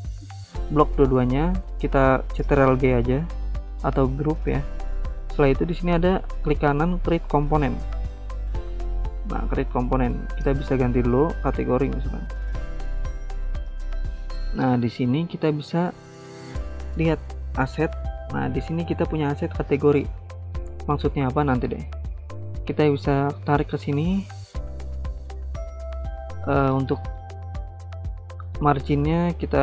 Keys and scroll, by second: 2.6 ctrl+g, 10.9-13.2 typing.